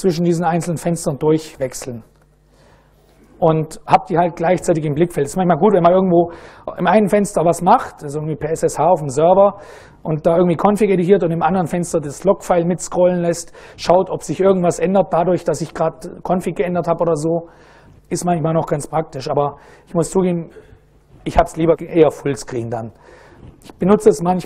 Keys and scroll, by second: 0.1 a, 0.4 Tab, 0.9 a, 1.1 Tab, 1.6 a, 1.9 Tab.